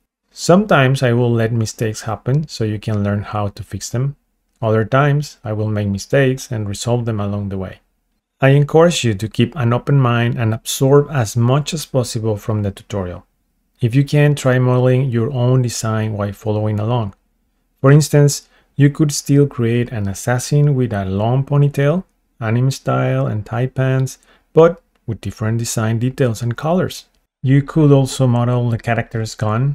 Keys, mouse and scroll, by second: 0.0 click, 0.0 r, 0.1 x, 4.5 Escape, 7.8 ctrl+Tab, 8.9 click, 10.0 click, 11.2 click, 12.2-15.5 drag, 22.2 shift+middle click, 22.5 click, 23.2 click, 24.2 middle click, 24.9 KP_8, 25.3 shift+middle click, 25.7 KP_1, 26.1 shift+middle click, 26.7-27.3 scroll up 2, 27.4 shift+middle click, 29.2-29.7 scroll down 3.